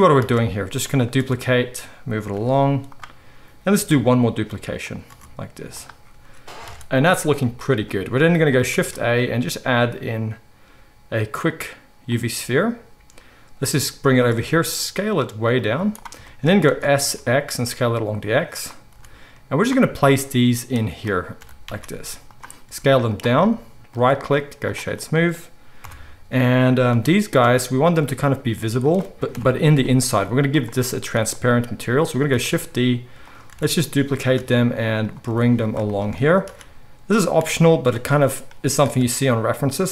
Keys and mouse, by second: 0.2 shift+d, 1.1 r, 2.3 g, 3.9 shift+d, 5.0 r, 6.6 alt+a, 8.7 shift+a, 13.6 g, 14.6 s, 15.7 z, 16.6 s, 18.9 g, 21.3 g, 22.6 s, 25.8 KP_7, 26.9 g, 28.2 g, 29.3 KP_7, 30.0 g, 32.3 shift+d, 33.4 r, 34.3 shift+d, 35.2 r, 36.4 shift+d, 38.4 r, 38.8 shift+d.